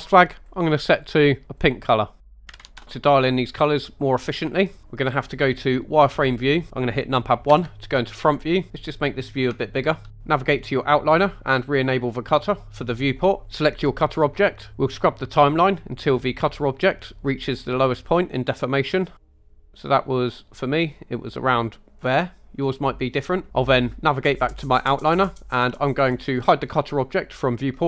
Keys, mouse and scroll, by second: 6.2 click, 7.5 KP_1, 9.6-10.0 shift+middle drag, 10.1 scroll up 1, 11.9 click, 13.6 click, 15.8-18.8 drag, 23.5 click, 27.3-27.8 drag.